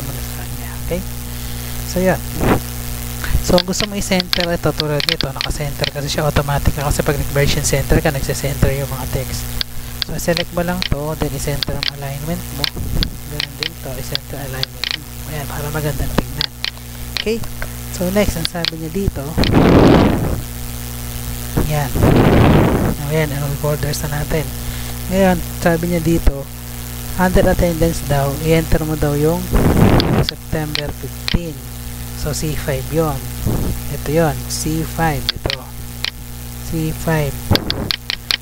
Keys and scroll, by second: 32.0 ctrl+c, 33.5 Tab, 38.3 ctrl+v.